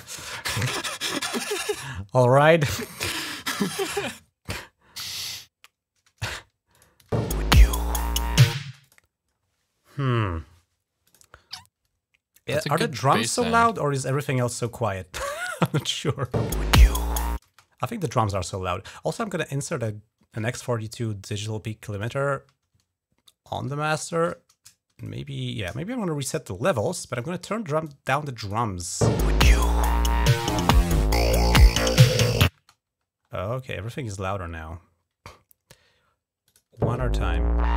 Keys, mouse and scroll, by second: 2.0-3.1 drag, 3.8 click, 4.3 click, 4.7-6.1 drag, 6.5 click, 6.9 space, 8.4 space, 8.6 click, 9.1-9.9 scroll down 3, 9.9-10.3 scroll up 2, 10.8 click, 12.2 scroll up 1, 13.7 scroll up 2, 14.4 click, 14.4 typing, 15.7 click, 16.1 typing, 17.2 space, 18.1 right click, 21.8 click, 23.2 click, 24.7 shift+click, 26.9 click, 27.7 click, 28.2 click, 28.8 space, 30.9 click, 31.7 click, 32.3 space, 33.0-33.5 scroll down 3, 36.2 click, 36.6 space.